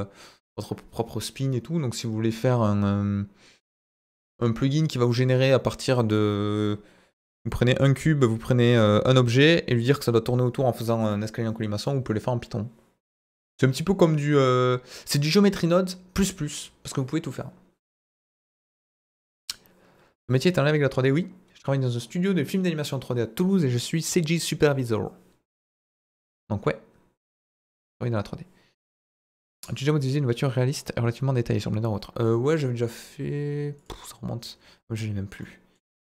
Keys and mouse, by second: 35.4 middle click.